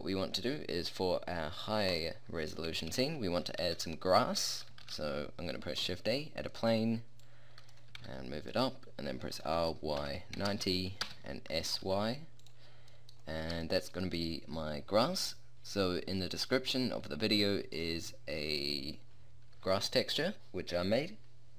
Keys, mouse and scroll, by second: 1.8-2.6 middle drag, 2.8-3.2 middle drag, 3.6 a, 4.8 shift+a, 7.2 drag, 8.0 g, 9.2 middle click, 9.4 r, 11.6 s, 12.6 middle click, 12.8 middle click, 13.0-15.1 middle drag, 15.1-17.0 middle drag, 19.6-21.5 middle drag.